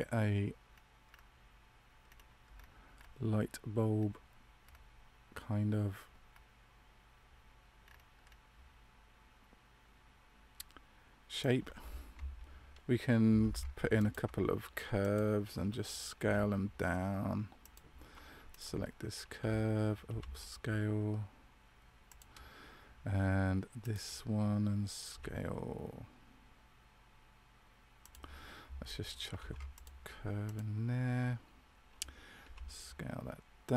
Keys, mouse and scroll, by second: 13.3 ctrl+r, 16.1 s, 18.4 alt+right click, 19.3 d, 20.0 s, 23.7 alt+right click, 25.0 s, 29.3 ctrl+r, 32.4 s.